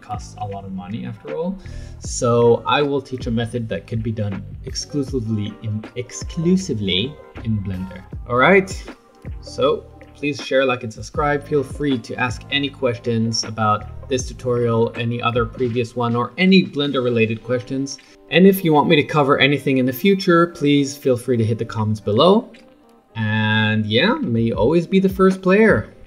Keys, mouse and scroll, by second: 8.0-10.6 middle drag, 24.1-24.6 scroll up 4, 24.6-25.1 middle drag, 25.1 scroll down 5.